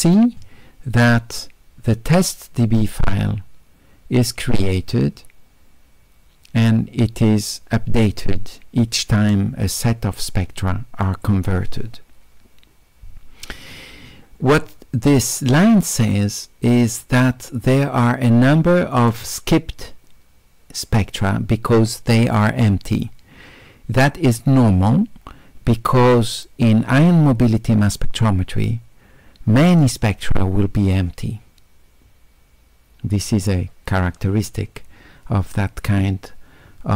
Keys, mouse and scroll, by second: 17.2-19.0 drag.